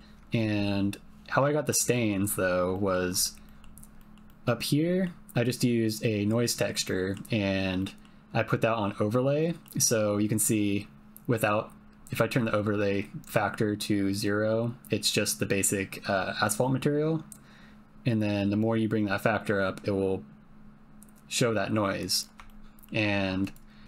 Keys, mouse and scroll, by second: 0.0 ctrl+middle click, 1.7 middle click, 2.8 middle click, 3.4 middle click, 4.0 middle click, 4.2 middle click, 4.9 middle click, 6.9 middle click, 7.8 middle click, 9.3 middle click, 10.4-22.0 drag, 22.5 shift+middle click, 23.4 click.